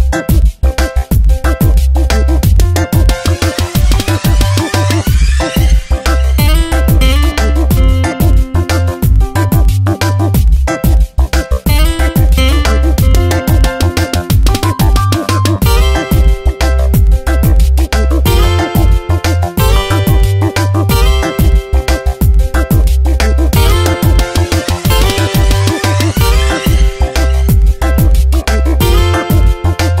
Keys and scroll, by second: 4.4 space, 5.0 Tab, 11.4 space, 12.0 Tab, 13.2 Tab.